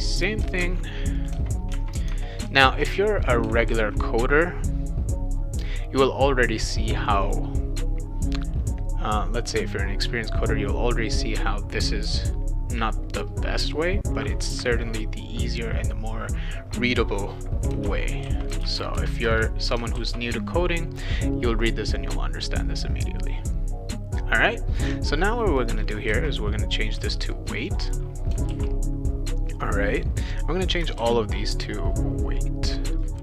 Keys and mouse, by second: 0.6 ctrl+c, 1.2 click, 1.7 Tab, 2.1 Tab, 2.6 ctrl+v, 3.6 ctrl+z, 7.1 click, 7.2 click, 17.7-19.1 typing, 19.2 Return, 19.9 ctrl+s, 21.6 click, 25.2 click, 26.1 shift+w, 26.9 e, 27.7 click, 27.9 click, 28.4 ctrl+s, 29.5 click, 30.4 click, 31.0 shift+w, 33.1 v.